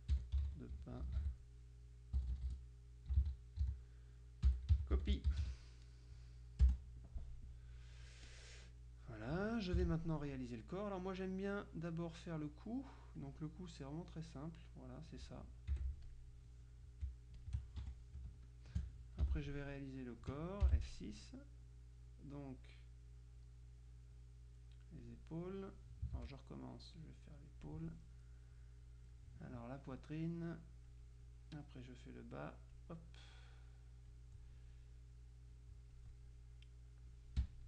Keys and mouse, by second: 0.0-2.3 typing, 3.7-5.8 typing, 6.7 Return, 7.3 click, 8.3 click, 9.9 F6, 12.0 click, 13.1 click, 14.0 click, 15.8 F7, 16.1 click, 17.5 shift+click, 17.9 shift+F1, 18.4 shift+space, 20.7 F6, 23.5-25.6 drag, 26.2 ctrl+z, 26.8-28.3 drag, 29.7 click, 32.2-33.3 drag, 33.4-34.7 drag, 35.3-36.9 drag.